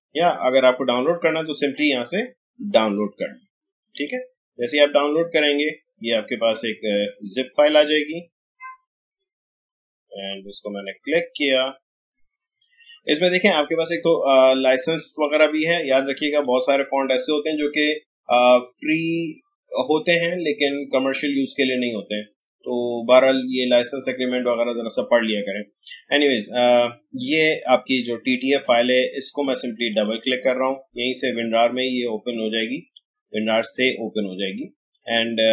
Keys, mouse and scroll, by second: 3.9 click, 10.4 click, 15.2 click, 28.6 click, 32.9-35.5 drag.